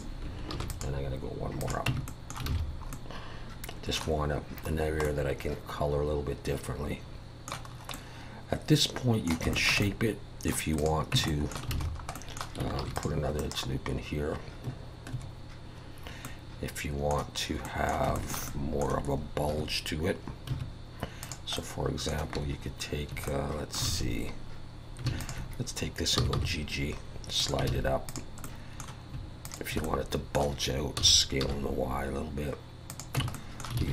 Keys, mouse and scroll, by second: 0.5 ctrl+r, 1.9 Tab, 2.1 middle click, 2.5 alt+a, 2.6 scroll down 2, 2.9 middle click, 4.7 scroll down 3, 5.0 middle click, 7.7 scroll up 2, 7.9 middle click, 9.5 shift+middle click, 9.8 middle click, 10.8 click, 11.1 Tab, 11.3 middle click, 11.7 alt+a, 11.9 scroll up 2, 12.1 middle click, 12.8 ctrl+r, 15.1 Escape, 16.2 middle click, 17.6 middle click, 18.3 shift+middle click, 18.5 middle click, 19.5 2, 20.5 1, 21.2 click, 21.6 middle click, 23.3 middle click, 23.9 alt+a, 25.2 alt+shift+click, 26.2 g, 27.7 alt+a, 28.1 click, 28.4 middle click, 29.4 shift+click, 29.8 middle click, 31.0 s, 33.2 Tab, 33.3 middle click, 33.8 alt+a.